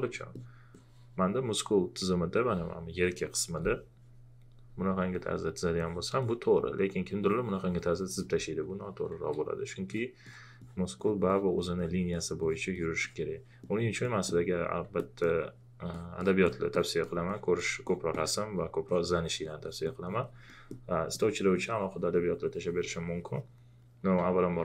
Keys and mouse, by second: 0.1 alt+click, 4.6 click, 9.1 ctrl+z, 9.9 click, 14.0 alt+click, 15.0 alt+click, 20.5 alt+click, 23.4-24.1 typing.